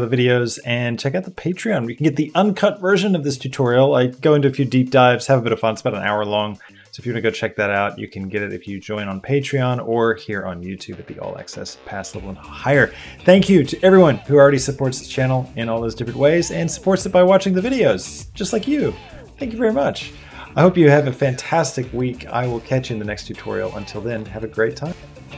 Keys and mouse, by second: 0.0 ctrl+space, 0.1 ctrl+z, 0.2 click, 0.4 ctrl+space, 0.5 ctrl+space, 0.5 click, 0.7 shift+a, 0.8 click, 0.9 shift+a, 1.1 click, 1.5 click, 1.6 click, 1.8 click, 2.0 click, 2.3 click, 2.6 click, 3.0 click, 3.3 click, 4.1 click, 4.3 click, 4.7-5.8 drag, 5.8 ctrl+z, 5.9 click, 6.1 click, 6.6 click, 7.2 click, 8.0 shift+click, 8.8 click, 8.9 shift+click, 9.7 click, 10.9 s, 11.1 r, 12.0 shift+a, 12.3 s, 12.3 Tab, 12.4 F3, 12.6 click, 12.7 click, 13.0 click, 13.1 Tab, 13.2 click, 13.3 Tab, 13.4 Tab, 13.4-16.3 typing, 13.8 Tab, 13.9 click, 16.3 shift+click.